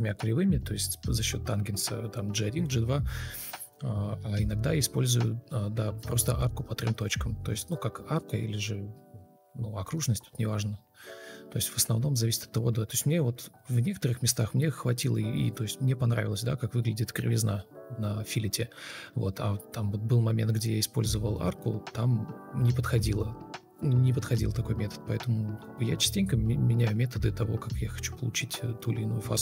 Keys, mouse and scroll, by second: 0.1 ctrl+alt+shift+o, 3.1 ctrl+shift+o, 7.8 alt+click, 14.1 ctrl+click, 18.6 shift+g, 20.7 ctrl+space, 21.5 ctrl+space, 22.0 ctrl+e, 24.5 Delete, 24.7 ctrl+space, 25.8 ctrl+click, 26.8 ctrl+space.